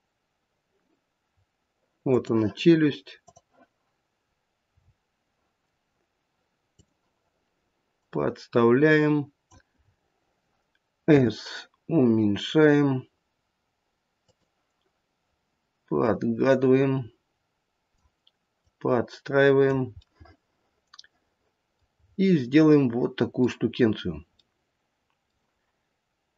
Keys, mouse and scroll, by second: 4.6-6.7 scroll down 5, 6.7 click, 6.7-7.8 scroll down 2, 9.7-11.0 scroll up 2, 11.0-12.8 scroll up 4, 12.8 s, 15.9 click, 18.6 click, 20.0 middle click, 21.9-22.8 scroll up 2, 22.8 middle click, 22.8 scroll up 2, 24.0-24.6 scroll down 1, 24.6 middle click, 25.2 middle click.